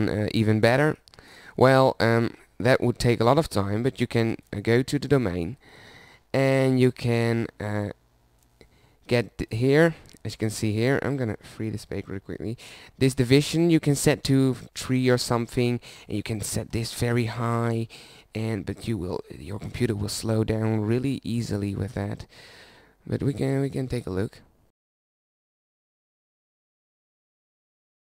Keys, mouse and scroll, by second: 0.0-2.8 drag, 3.8-17.7 drag, 18.6-20.2 drag.